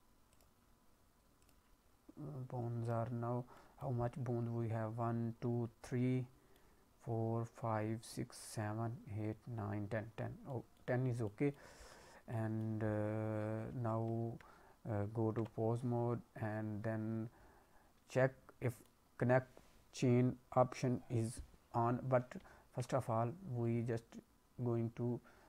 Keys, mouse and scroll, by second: 0.3 click, 1.4 click, 2.2-2.8 scroll up 2, 2.8 click, 3.5 middle click, 5.8 middle click, 10.3 scroll down 1, 10.4 middle click, 11.2 middle click, 12.2 middle click, 14.3 ctrl+Tab, 17.3-17.9 scroll down 3, 18.2-18.6 scroll up 3, 18.6 middle click, 21.5-22.1 scroll down 2, 22.3 ctrl+Tab, 23.6-24.7 scroll down 2, 24.7-25.3 scroll down 1.